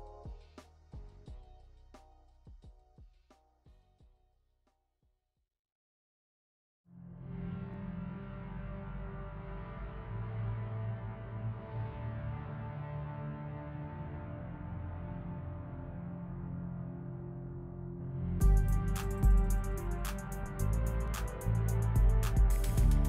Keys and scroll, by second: 7.8 F4, 14.6 s, 15.1 s, 15.2 s, 15.4 s, 17.1 f, 18.1 shift+s, 18.8 shift+s, 21.5 p, 22.8-23.0 typing.